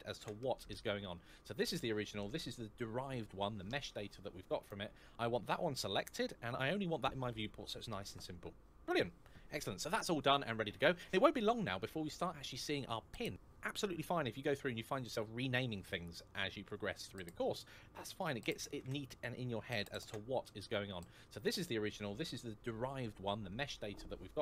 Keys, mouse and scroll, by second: 1.3 click, 6.6-7.0 scroll down 1, 7.0-8.6 scroll up 1, 13.2 Return, 13.2 l, 13.2 a, 16.4 click, 18.5 BackSpace, 19.5 space, 19.8 Return, 21.1 click.